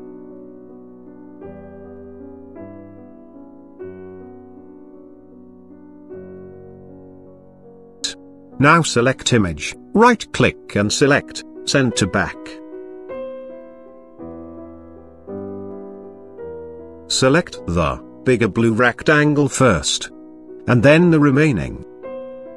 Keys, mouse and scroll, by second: 0.2 click, 0.5 click, 0.6 click, 0.9 click, 1.3 click, 1.6 click, 1.7 click, 2.0 click, 2.3 click, 2.4 click, 2.7 click, 2.9 click, 2.9 click, 3.0 click, 3.1 click, 3.4 click, 3.6 click, 3.9 click, 4.1 click, 4.3 click, 4.4 click, 4.8 Up, 4.9 click, 5.0 Right, 5.1 click, 5.1 click, 5.2 click, 5.4 Right, 5.4 Up, 5.6 click, 5.6 Left, 5.8 click, 5.9 Up, 6.0 click, 6.3 click, 6.3 click, 6.4 ctrl+d, 6.5 click, 6.6 click, 6.7 click, 7.0 click, 7.2 click, 7.3 Up, 7.5 click, 7.6 click, 7.7 click, 7.8 click, 7.9 Left, 7.9 click, 8.0 click, 9.5 click, 10.5 click, 11.1 right click, 13.1 click, 14.8 click, 16.9 click, 19.8 ctrl+click.